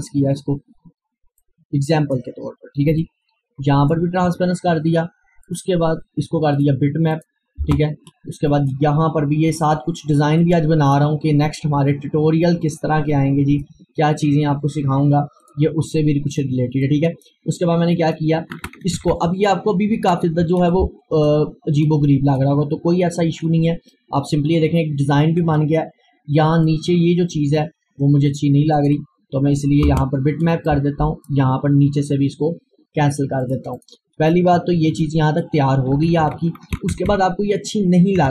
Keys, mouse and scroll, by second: 1.4-5.5 drag, 5.5 click, 7.7 Return, 8.5-12.7 drag, 12.7-18.8 drag, 18.8 Down, 20.8 click, 21.9-23.9 drag, 23.9 scroll down 1, 26.2 scroll up 1, 26.5 click, 29.9 Return, 30.7-35.5 drag, 35.5 Down.